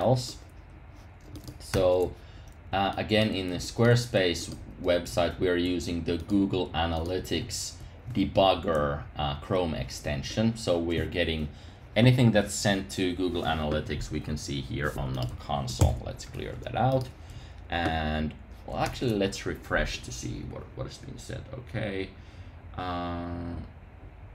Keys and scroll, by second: 1.7 super+r, 7.6 Up, 8.7 Up, 9.3 Up, 15.8 super+k, 18.8 super+r.